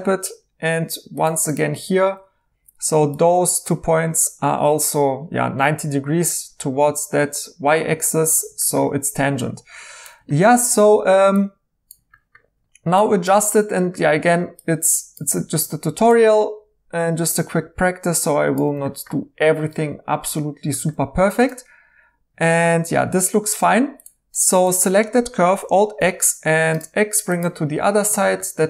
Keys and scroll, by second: 2.5 1, 22.9-23.6 typing, 25.6 alt+x.